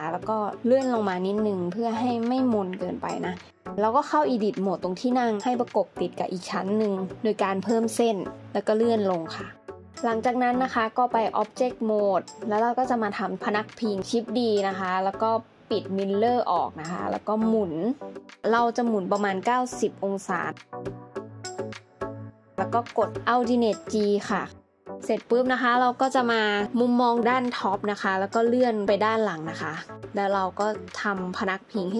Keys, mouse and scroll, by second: 1.9 alt+z, 2.5 Tab, 2.8 middle click, 4.4 Tab, 5.3 ctrl+r, 8.7 scroll down 1, 11.6 scroll down 1, 11.9 middle click, 14.1 shift+d, 24.0 alt+g, 29.0 scroll up 1, 31.5 alt+z, 31.8 Tab.